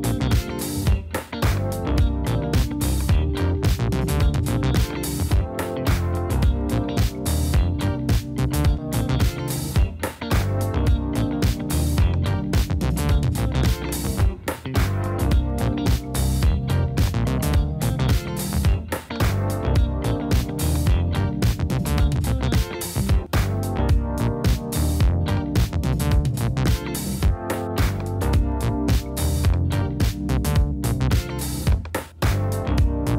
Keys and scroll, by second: 6.8 super+z, 17.8 BackSpace.